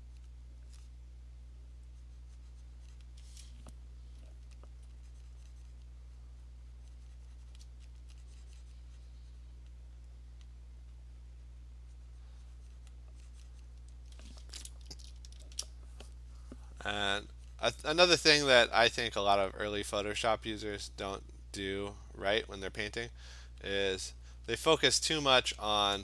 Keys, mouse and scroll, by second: 0.3 click, 0.6 click, 3.0 click, 4.3-4.9 alt+click, 4.7 click, 7.6 click, 8.0 alt+click, 9.7 click, 10.5 click, 10.7 alt+click, 12.9 click, 13.7 click, 15.4 $, 17.6 click, 20.9 click, 21.7 click, 21.9 click, 23.6 click, 24.0 click, 24.4 click, 24.7 click, 24.8 click, 25.2 click.